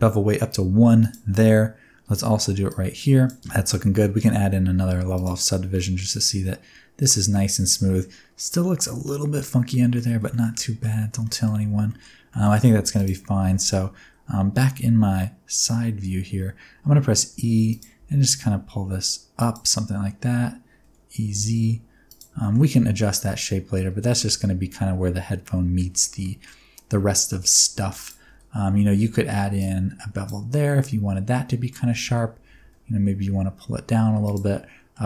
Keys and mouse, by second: 2.7 click, 3.4 Tab, 5.2 click, 5.7 middle click, 7.1-8.0 middle drag, 8.5 middle click, 9.7 middle drag, 10.3 shift+middle drag, 10.6 middle drag, 11.0 shift+middle click, 11.2 middle drag, 11.6 Tab, 11.9 middle click, 12.3 middle click, 12.7 3, 14.9 KP_3, 15.5 KP_1, 17.3 e, 17.7 click, 17.9 g, 19.4 click, 20.3 e, 20.8 z, 21.3 z, 22.1 click, 22.4 shift+middle click, 23.3 middle click, 23.9 Tab, 24.1-25.7 middle drag, 25.9 Tab, 26.2 middle click, 26.8 alt+z, 27.4 alt+z, 27.8 2, 28.3 alt+z, 28.8 alt+z, 29.7 click, 30.5-31.7 middle drag, 31.9 alt+z, 32.1 alt+z, 32.5 g, 32.6 g, 34.2 click, 34.5 middle click.